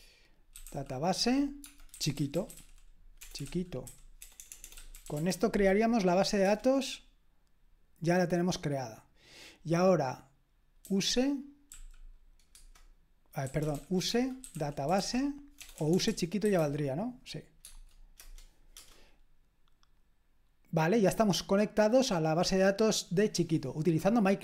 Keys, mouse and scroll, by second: 0.0-6.4 typing, 11.3-17.1 typing, 18.2-19.3 typing.